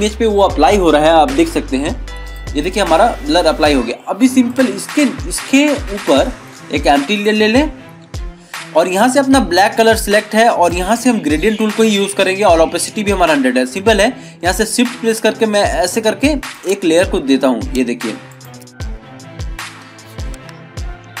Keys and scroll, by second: 21.0 ctrl+=.